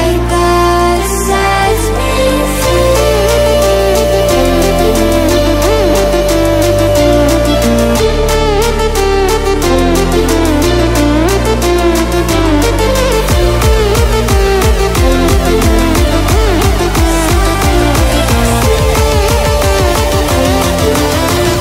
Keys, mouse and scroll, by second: 4.2 Delete, 5.3 alt+scroll down 1, 5.9 alt+scroll up 1, 6.5 click, 11.7 ctrl+click, 12.1-12.8 typing, 16.1 ctrl+w, 17.2 ctrl+w, 18.1-20.3 drag.